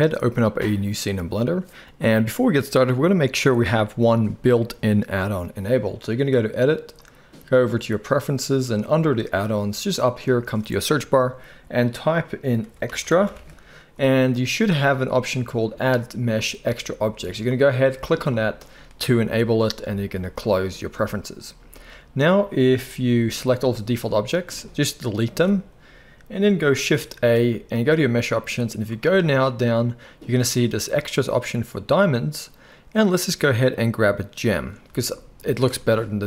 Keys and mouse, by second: 6.8-36.2 drag, 25.3 Delete, 27.2 shift+a.